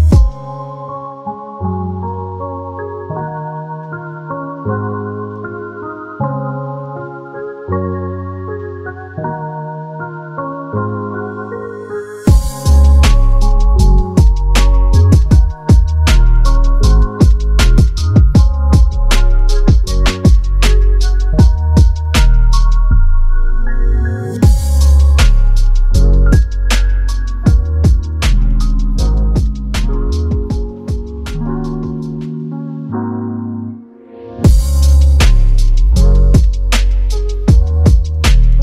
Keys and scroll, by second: 19.7-20.2 [, 24.5 space, 25.8 space, 27.8 ], 33.7 space, 37.7 space.